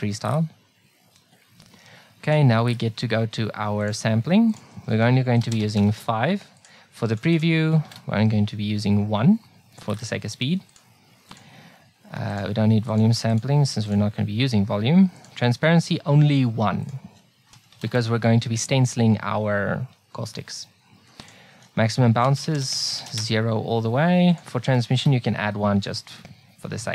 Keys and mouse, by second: 2.3-6.5 drag, 6.6-9.5 drag, 10.7-18.7 drag, 21.3-23.1 drag, 24.3-26.2 drag.